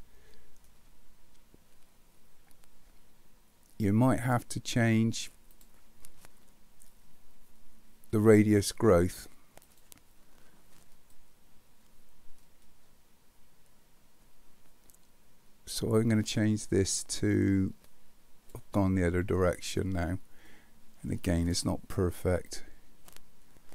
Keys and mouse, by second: 9.7 click, 11.2-18.5 drag, 20.5 middle click, 22.5-23.7 drag.